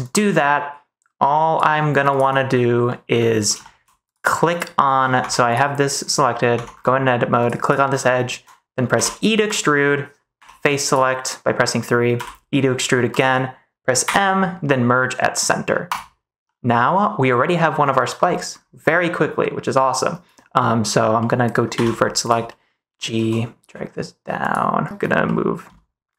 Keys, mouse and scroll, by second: 2.4 middle click, 2.8 middle click, 3.5 shift+middle click, 5.1 Tab, 6.4 Tab, 7.3 click, 8.8 e, 9.3 click, 10.3 3, 12.0 e, 13.0 click, 13.9 m, 16.4-17.6 middle drag, 20.5 middle click, 21.1 middle click, 21.6 1, 22.4 middle click, 23.0 g, 25.3 middle click.